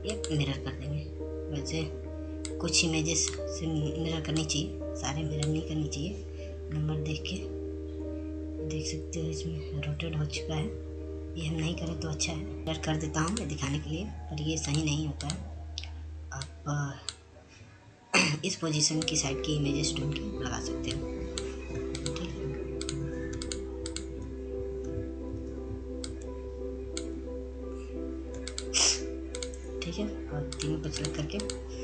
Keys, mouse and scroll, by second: 2.2 click, 4.4-8.8 shift+drag, 8.8-9.2 scroll up 1, 12.4 scroll down 1, 13.0-22.1 drag, 22.1-23.4 drag, 26.9-31.8 drag.